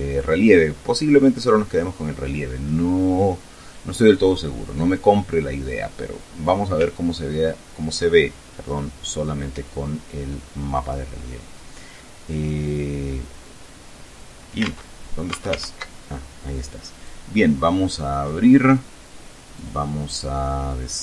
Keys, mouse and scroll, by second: 14.2 alt+Tab, 14.8 alt+Tab, 16.6-18.0 drag, 19.1 click.